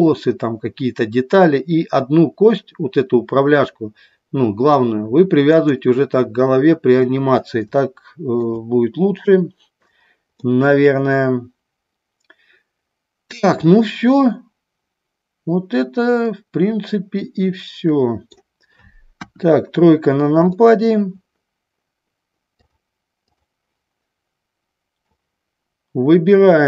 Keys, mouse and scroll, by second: 5.7 click, 8.0 shift+middle click, 10.5-18.5 middle drag, 19.3 KP_1, 20.7 middle click, 25.4-26.6 drag.